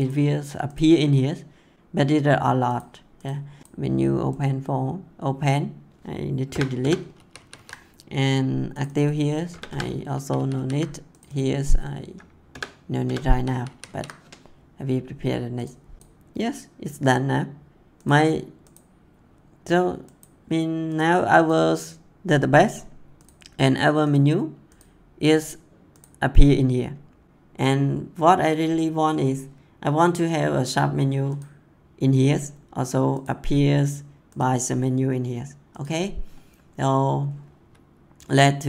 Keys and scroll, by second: 6.4 BackSpace, 7.1 ctrl+s, 9.4 BackSpace, 10.1 ctrl+s, 12.4 BackSpace, 13.2 ctrl+s.